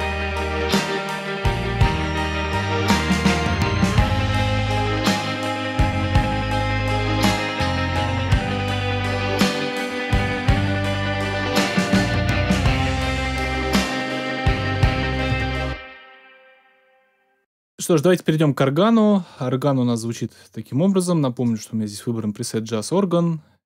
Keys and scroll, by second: 15.2 space.